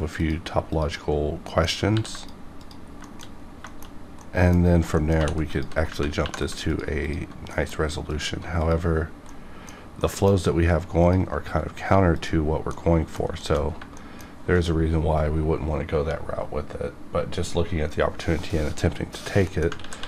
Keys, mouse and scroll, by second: 0.2 click, 1.2 scroll down 1, 1.5 middle click, 1.9 ctrl+r, 2.1 ctrl+click, 2.6 click, 2.8-3.6 scroll down 2, 3.0 shift+middle click, 3.9 shift+middle click, 4.2 middle click, 4.6 scroll up 1, 4.9 middle click, 5.4 2, 5.5 alt+click, 6.2 2, 6.7 alt+click, 7.5 middle click, 8.1 alt+click, 8.6 click, 9.3 middle click, 11.0 ctrl+click, 12.7 middle click, 13.4 shift+middle click, 13.6 shift+scroll down 1, 13.9 middle click, 19.5 middle click, 19.8 ctrl+z.